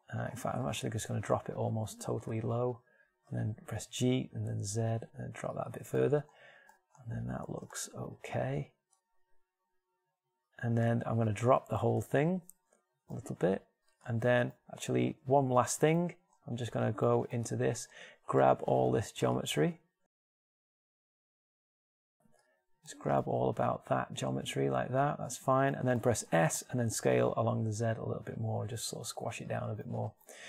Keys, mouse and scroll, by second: 2.5-4.3 drag, 2.9 g, 5.9 click, 7.6 middle click, 8.9 middle click, 9.9 middle click, 12.5 Tab, 13.1 g, 15.7 Tab, 16.7 z, 18.5 ctrl+Tab, 20.3 b, 22.9-24.9 middle drag, 26.7 s.